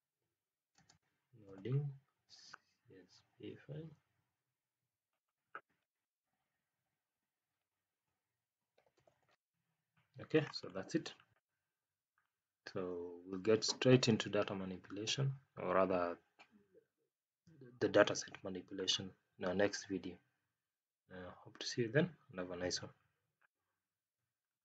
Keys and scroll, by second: 0.7 space.